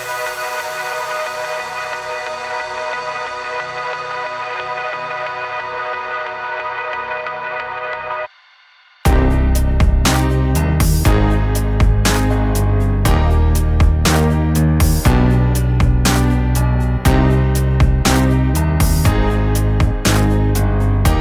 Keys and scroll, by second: 3.1 Escape.